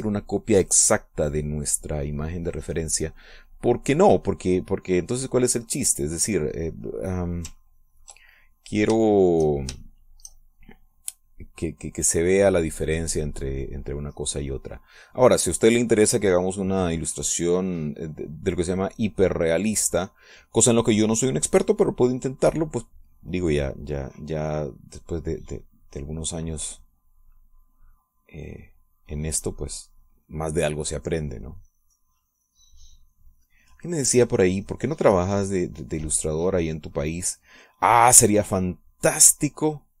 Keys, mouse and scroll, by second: 6.3-8.4 drag, 9.0 ctrl+click, 9.6 ctrl+click, 10.2 shift+click, 10.9-16.5 shift+drag, 16.7-20.2 shift+drag, 20.6 click, 26.9-34.5 drag, 34.9-37.5 drag, 38.1-40.0 drag.